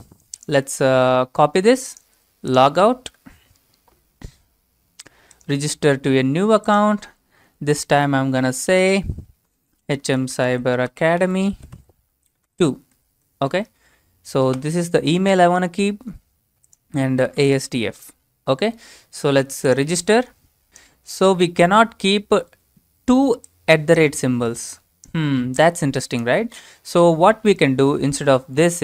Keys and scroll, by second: 1.4 ctrl+c, 9.4-13.0 typing, 13.4 Tab, 14.6 ctrl+v, 17.1-18.0 typing.